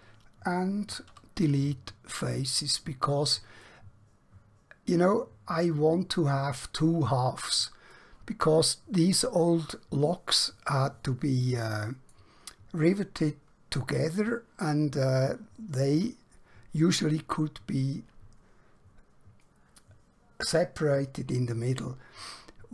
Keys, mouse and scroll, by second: 1.2 x, 2.4 click, 3.7 middle click.